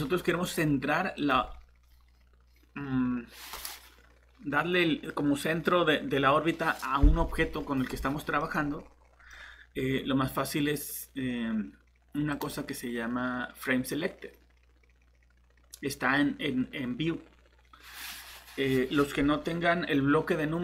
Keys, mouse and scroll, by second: 0.2 middle click, 1.2 click, 8.4 middle click, 12.3 click.